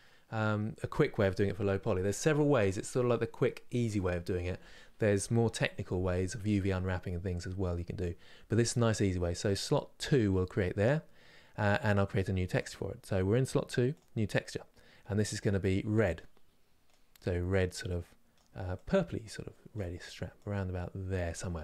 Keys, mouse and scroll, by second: 13.6 click, 15.8 click.